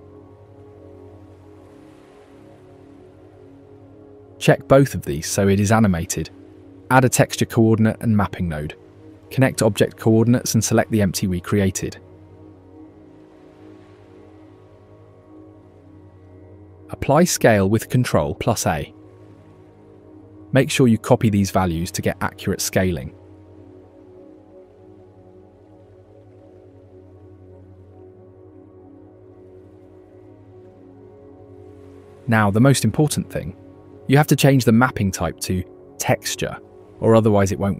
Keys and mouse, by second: 1.9 click, 3.3 click, 4.3 click, 4.7 click, 6.6 click, 8.0 ctrl+t, 8.5 click, 9.4 click, 10.4 click, 11.7 click, 13.3 click, 17.1 ctrl+a, 22.0 z, 23.1 ctrl+shift+click, 24.9 click, 25.9-27.6 drag, 28.4 click, 29.5-30.9 drag, 30.8 KP_0, 34.3 click, 35.1-36.4 drag.